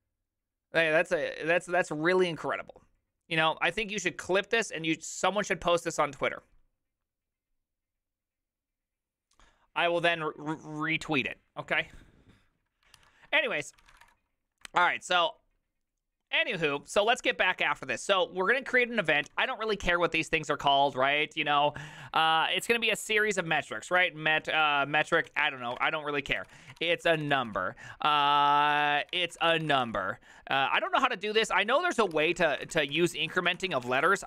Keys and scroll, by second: 13.7-14.5 typing, 14.9 Return, 17.4 alt+{, 19.3 o.